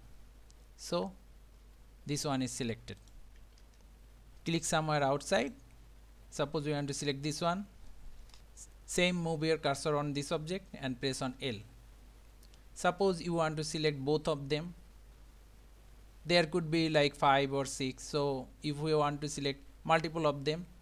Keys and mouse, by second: 1.0 g, 3.6 ctrl+z, 5.4 click, 11.4 l.